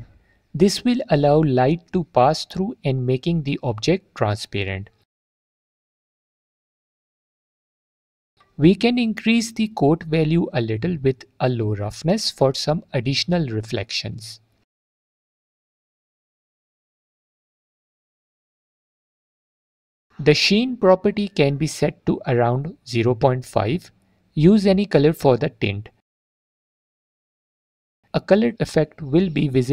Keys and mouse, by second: 7.3-8.4 drag, 9.2 alt+click, 11.5 click, 13.8-16.0 drag, 16.3 click, 20.0-20.8 drag, 21.8-24.5 drag, 24.9 click, 29.5 click.